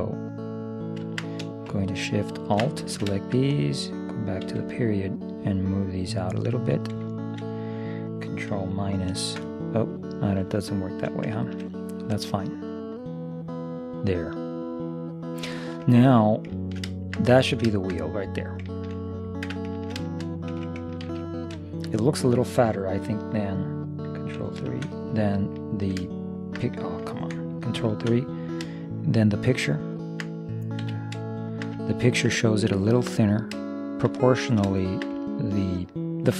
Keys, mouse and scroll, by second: 2.4 right click, 2.9-4.3 middle drag, 3.6-7.0 drag, 3.6 right click, 4.5 ., 9.2 ctrl+KP_Subtract, 10.9-12.3 right drag, 11.5 click, 12.8-14.5 drag, 15.8-18.7 middle drag, 19.5 Tab, 21.2 ctrl+s, 24.8 ctrl+KP_3, 25.9-27.8 middle drag, 28.0 ctrl+KP_3, 29.2 middle click, 30.9 z, 35.5-36.3 middle drag.